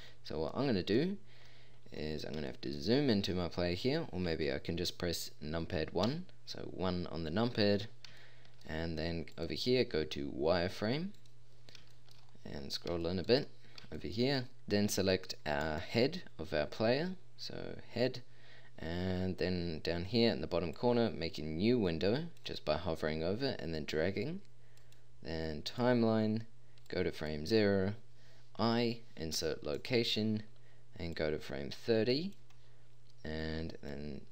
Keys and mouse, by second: 0.5 middle drag, 6.1 KP_1, 15.6 click, 26.9 click, 28.6 i, 31.2-32.4 drag, 32.8 click, 34.0-34.3 drag.